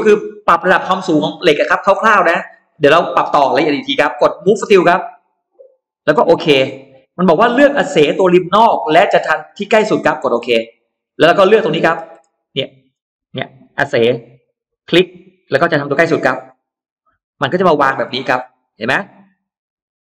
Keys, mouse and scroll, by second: 4.8 click, 10.6 click, 11.3 middle click, 11.6-11.9 scroll down 2, 11.9-13.0 scroll up 4, 14.9 click, 16.6 click, 17.4-18.5 scroll down 4, 19.0-20.1 middle drag, 19.1-19.4 scroll down 1.